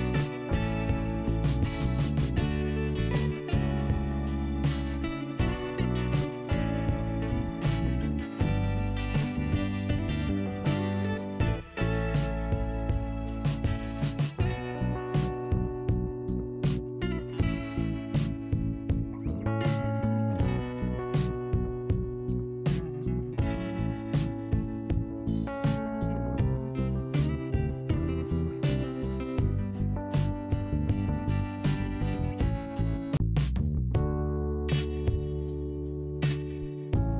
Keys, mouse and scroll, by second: 7.2 click, 7.4 click, 8.2 click, 14.3 click, 14.5 click, 15.2 click, 15.7 scroll up 2, 16.4 click, 17.5 click, 19.3 click, 20.2 scroll down 1, 20.9-21.6 scroll up 1, 21.9 click, 23.0-23.8 scroll down 2, 23.8 click, 25.6 click, 30.4 click, 30.6 click, 30.7 click, 32.1 click, 33.1 5, 34.7 click, 35.6 click.